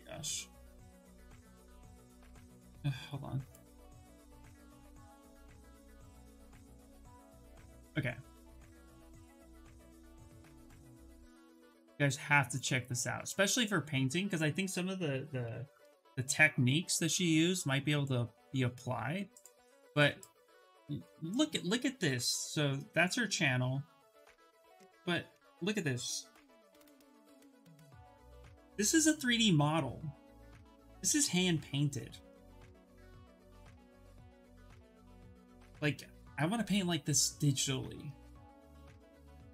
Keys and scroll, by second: 15.1 ctrl+v, 15.4 Return.